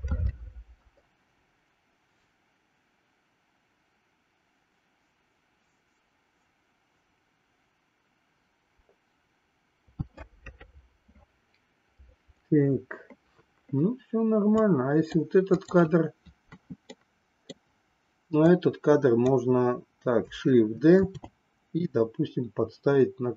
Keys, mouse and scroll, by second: 14.6 click, 15.6 click, 17.0 middle click, 18.4 click, 21.1 shift+d.